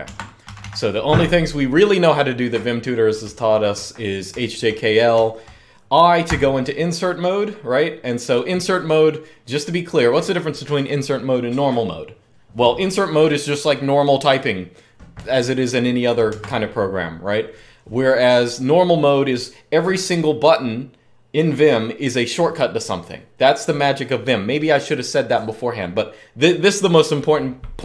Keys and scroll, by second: 0.0-0.7 typing, 3.0-3.4 k, 4.1 j, 4.4 j, 4.6 j, 5.8-6.5 typing, 16.1 Escape.